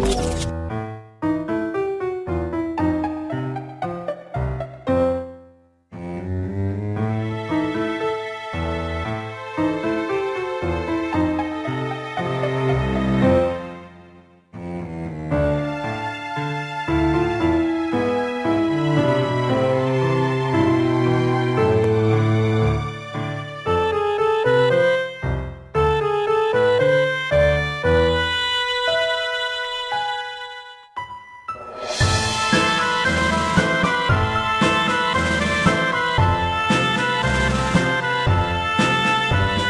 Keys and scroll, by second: 1.7 x, 8.5 x, 14.7 x, 15.7 x, 17.4 x, 17.8 ctrl+z, 18.5 x, 19.3 x, 29.6 Left.